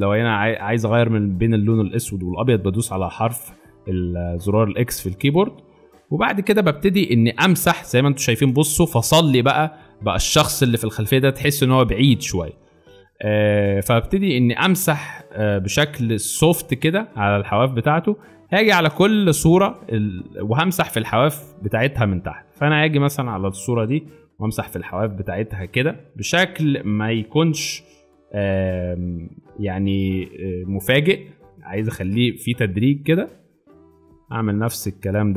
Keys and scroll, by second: 2.5 x, 9.2 space, 15.6 space, 24.3-24.9 [, 28.3 [, 28.4 ].